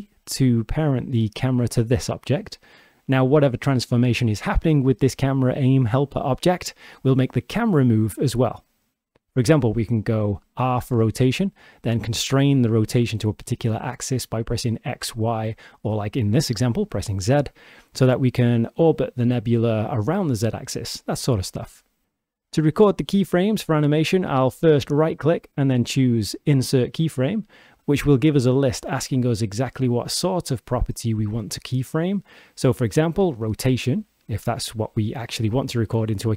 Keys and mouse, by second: 2.2 click, 4.2 r, 8.6 click, 10.8 r, 11.3 z, 24.5-33.3 drag.